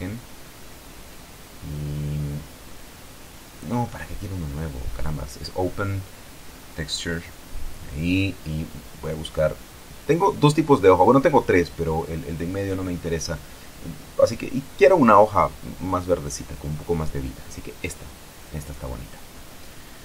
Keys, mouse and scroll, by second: 3.0 click, 4.7 Escape, 5.5 click, 7.2 click, 8.2 click, 9.1-9.5 scroll down 1, 19.7 click.